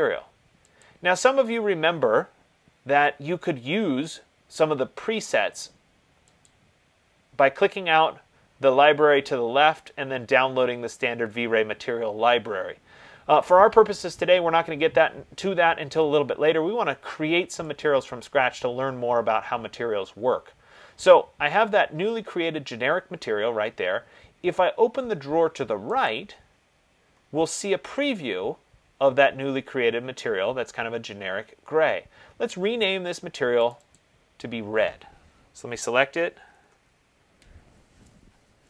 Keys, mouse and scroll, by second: 1.0 click, 6.7 click, 18.1-23.0 drag, 26.3 click, 33.9 click, 34.2 click, 35.9 ctrl+a, 36.7-37.0 typing.